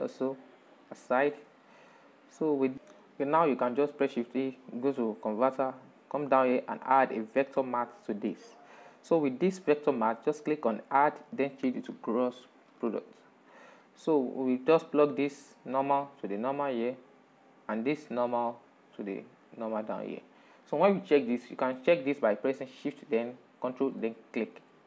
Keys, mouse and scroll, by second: 0.9 click, 2.1 shift+middle click, 2.7 click, 3.2 shift+a, 7.8-9.5 middle drag, 9.5-13.3 drag, 14.4 click, 17.1 drag, 23.3 ctrl+shift+click.